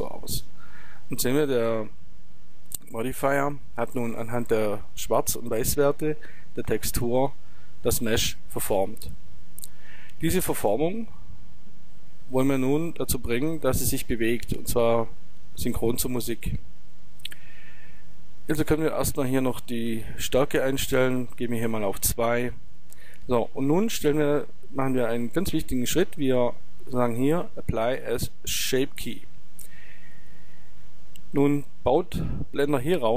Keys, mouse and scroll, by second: 2.7-7.4 middle drag, 10.8-12.6 middle drag, 18.7-20.5 drag, 30.2-33.1 drag.